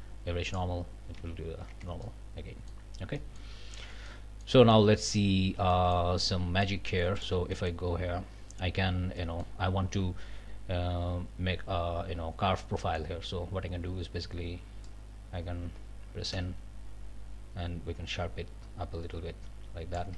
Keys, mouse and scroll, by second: 0.5 click, 1.2 alt+a, 1.7 alt+Tab, 2.0-2.3 scroll up 2, 2.3 click, 2.9 scroll up 2, 3.2 click, 3.8 Tab, 5.7 shift+middle click, 6.2 shift+click, 7.2 click, 7.5 click, 9.2 click, 12.8 click, 14.9-20.1 drag, 16.3 n.